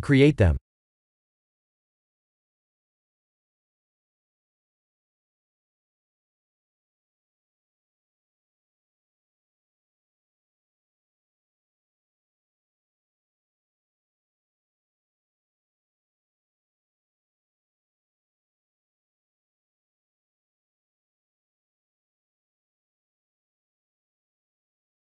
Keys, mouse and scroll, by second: 0.6 g, 4.0 middle click, 4.6-5.5 scroll down 2, 5.0 g, 7.4 KP_1, 8.6 KP_3, 9.5-10.5 scroll up 7, 10.9 shift+middle click, 11.4 shift+middle click, 12.0 shift+d, 13.4 s, 14.9 s, 15.7 g, 19.0 KP_1, 19.6-20.9 scroll down 18, 21.1 shift+middle click, 21.7-22.2 scroll up 7, 23.9-24.6 scroll down 9, 24.6 KP_3.